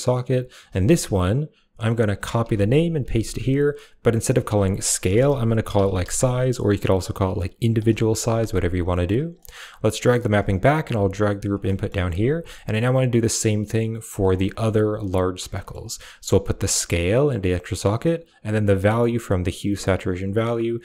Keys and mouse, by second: 0.4 click, 1.2 click, 2.0 click, 2.1-2.6 ctrl+drag, 2.7-7.7 ctrl+drag, 8.8 middle click, 9.2 middle click, 9.8 click, 10.5 click, 10.8 g, 11.3 click, 11.5 middle click, 12.0 g, 12.1 click, 12.4 middle click, 13.8 click, 14.2 middle click, 15.4 click, 16.2-17.2 drag, 20.0 click.